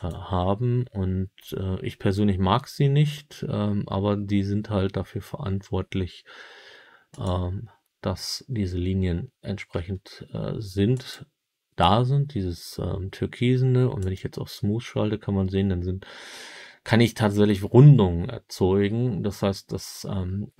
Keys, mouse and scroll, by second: 9.7 Tab, 10.9-14.1 drag.